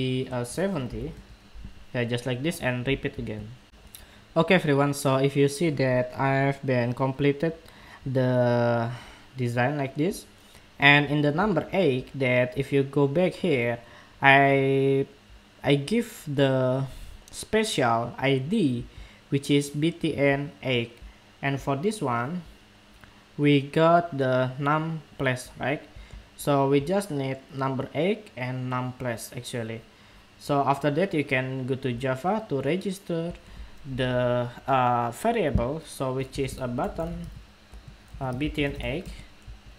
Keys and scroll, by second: 3.4 shift+super+2.